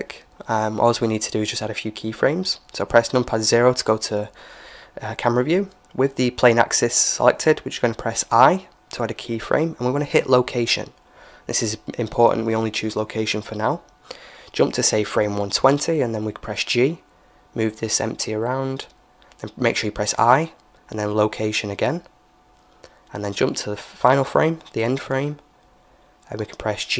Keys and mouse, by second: 0.9-2.9 middle drag, 2.3 KP_0, 12.3-14.1 drag, 15.4 g, 19.8 i, 24.3-26.1 drag.